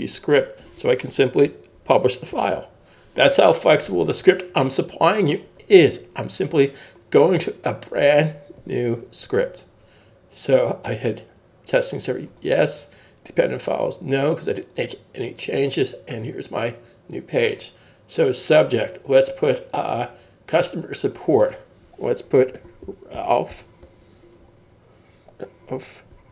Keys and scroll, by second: 2.3 super+F12, 22.1-24.2 typing, 26.1-26.3 typing.